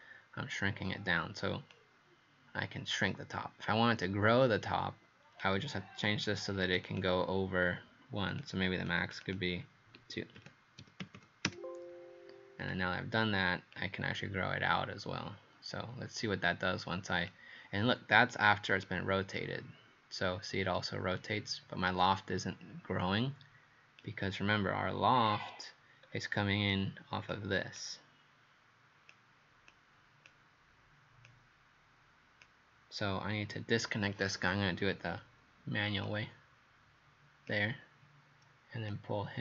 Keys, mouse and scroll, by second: 1.7 click, 6.9 click, 8.3 click, 8.9 click, 10.4 KP_2, 10.8 KP_Decimal, 11.0 KP_0, 11.2 KP_0, 11.5 KP_Enter, 12.6 click, 25.2 scroll down 2, 26.0 scroll down 1, 26.7 click, 27.8 click.